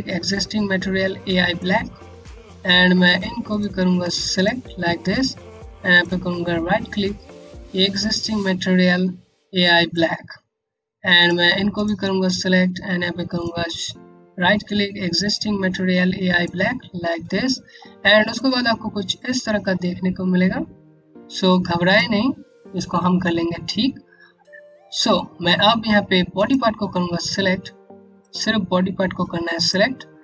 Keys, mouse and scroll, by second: 3.0 click, 3.8 shift+click, 5.6 right click, 10.7 click, 11.3 click, 12.9 right click, 16.7 scroll up 1, 17.4 scroll down 1, 17.9 click, 23.9 scroll up 1, 25.9 click, 30.0 right click.